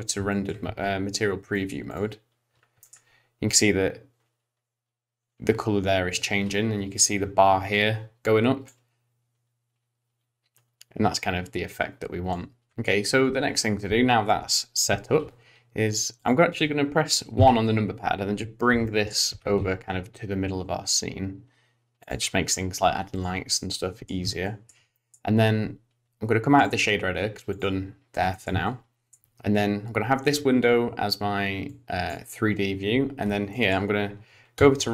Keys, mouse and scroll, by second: 0.3 shift+middle click, 0.6 z, 1.5 middle click, 1.9 click, 2.3-3.5 scroll up 3, 3.5 middle click, 3.5 click, 8.6 click, 12.7 shift+middle click, 12.7-14.1 scroll down 1, 15.3 scroll down 1, 16.2 click, 17.4 KP_1, 18.5 scroll down 1, 18.8 shift+middle click, 19.3 g, 23.1 click, 23.5 middle click, 24.4 shift+middle click, 24.9 middle click, 26.6 click, 28.3 middle click, 28.6 shift+middle click, 31.7 click, 33.5 middle click, 34.6 z.